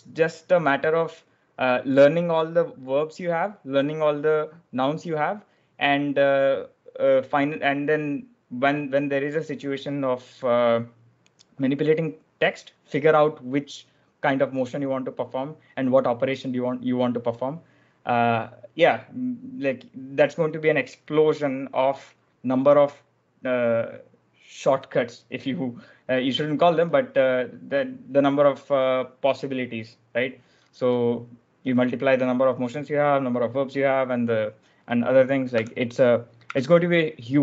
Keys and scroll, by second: 35.5 b, 36.3 w.